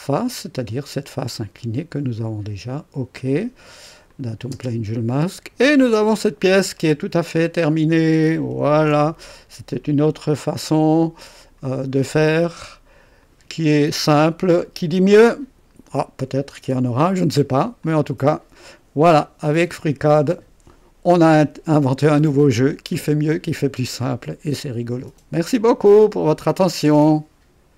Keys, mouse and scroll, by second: 0.0 click, 1.4 click, 2.6 click, 4.0 click, 4.5 space, 5.1-7.4 drag, 6.7 right click, 7.9 click, 8.7 ctrl+d, 9.7 ctrl+click, 11.4 click, 12.2 click, 13.2 click, 13.8 click, 14.6-16.1 drag, 16.5 scroll up 1, 17.2 right click, 17.8-18.7 drag, 24.2-25.0 drag, 26.5 right click, 27.7 click.